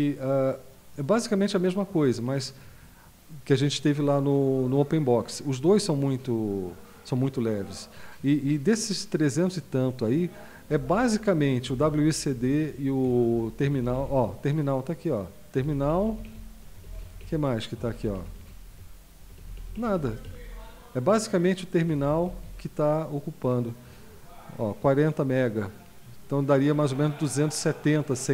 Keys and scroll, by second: 10.7 Down, 11.0 Down, 11.6 Up, 11.8 Up, 12.3 Down, 12.7 Down, 13.0-14.3 typing, 15.5-17.0 typing, 17.2 Down, 17.8 Down, 17.9 Down, 18.4 Down, 18.7 Down, 19.2 Down, 19.4 Down, 19.6 Down, 19.7 Down, 19.9 Down, 20.2 Up, 20.4 Up, 20.6-21.7 Up, 21.9 Up, 22.1 Up, 22.2 Up, 22.4 Up.